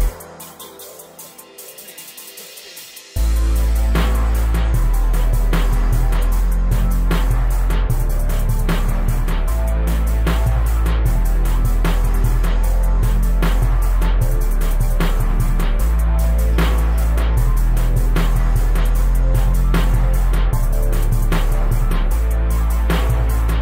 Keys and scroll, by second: 5.2 space, 6.5 m, 11.9 space, 13.2 o, 15.7 space, 17.6 q, 22.3 s.